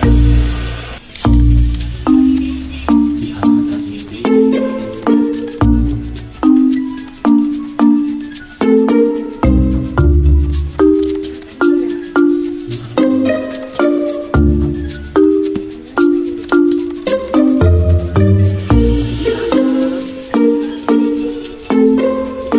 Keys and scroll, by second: 0.0-4.1 typing, 1.3 Escape, 2.8 ctrl+a, 6.2-7.1 typing.